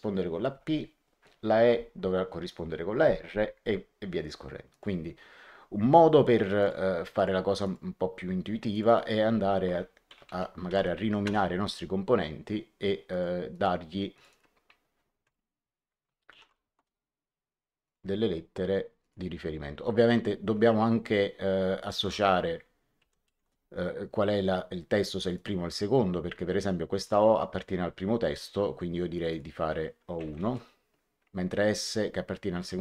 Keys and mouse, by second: 4.6 click, 6.5 click, 8.6 click, 10.0 Home, 10.2 shift+End, 10.5 shift+s, 11.2 Return, 11.2 KP_Enter, 13.0 click, 16.2 shift+o, 16.7 Return, 17.8 click, 18.9 click, 21.7 click, 22.9 End, 23.2 2, 23.4 Return, 25.1 click, 26.9 click, 29.1 click, 30.1 End, 30.3 1, 30.4 Return.